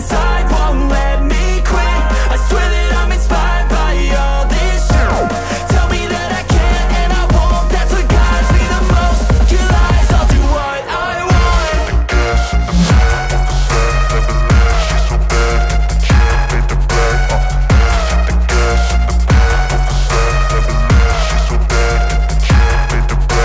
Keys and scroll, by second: 0.1 ctrl+v, 1.8 shift+', 2.2 ctrl+s, 3.5 i, 4.7 Return, 5.6-7.3 typing, 8.6-12.8 typing, 13.4 Down, 14.0-16.9 typing, 17.1 KP_Add, 17.3 KP_Add, 17.9 BackSpace, 18.1 ;, 18.6 ctrl+s.